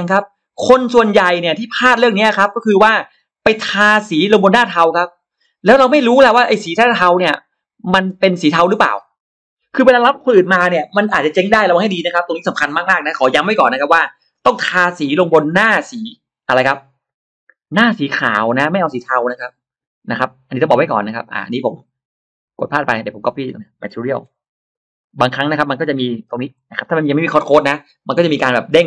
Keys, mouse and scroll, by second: 0.5 click, 1.9-3.1 shift+drag, 3.5 shift+click, 4.6 shift+right click, 4.8 shift+right click, 6.0 drag, 6.4 space, 6.5 click, 6.7 middle click, 7.2-7.5 scroll up 1, 8.1 click, 8.1 space, 20.5-20.8 scroll down 1, 21.1 click, 22.5 click, 22.6 click, 22.8 click, 24.1 ctrl+c, 24.8 click, 25.0 click, 25.2 click, 26.2 ctrl+v, 26.4 click.